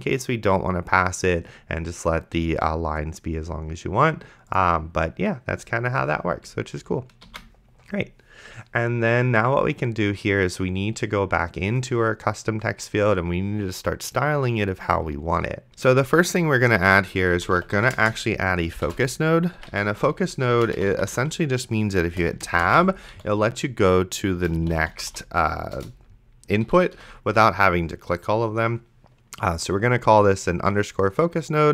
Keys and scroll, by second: 7.5 ctrl+s, 16.1 Return, 17.1-25.6 typing, 25.8 Return, 26.7 End, 27.0 ;.